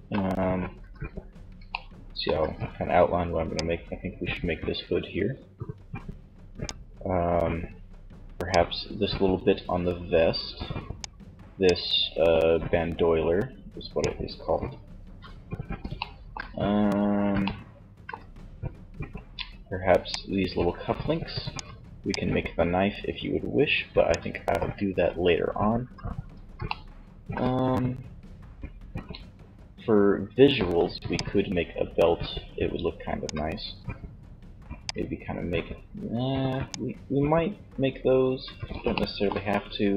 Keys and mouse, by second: 2.7-4.6 shift+drag, 2.7 d, 7.5 d, 7.7-9.6 drag, 10.5 d, 19.0 d, 19.3-21.1 drag, 21.1 d, 25.9-28.9 middle drag, 30.1 d, 30.3-32.0 drag, 34.0-35.8 drag, 34.0 d, 38.1-39.9 middle drag.